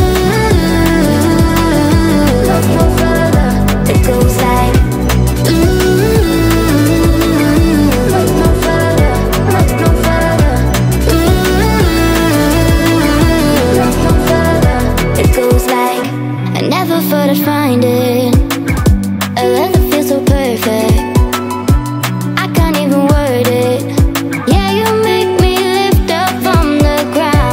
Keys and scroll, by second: 6.1 Caps_Lock, 8.5 8, 9.6-12.4 typing, 18.9-19.9 typing, 26.5 ctrl+v.